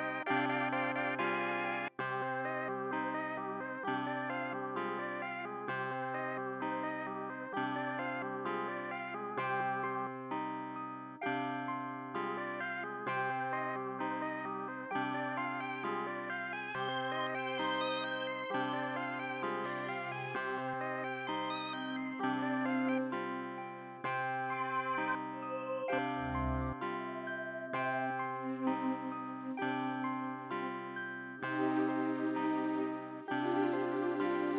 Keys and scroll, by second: 1.8 space, 1.9 space, 2.0 e, 4.6 super+x, 4.8 super+l, 5.1 e, 6.9 super+l, 7.4 e, 8.0 e, 9.9 super+x, 11.7 super+b, 12.0 super+s, 12.8 super+s, 16.6 super+s.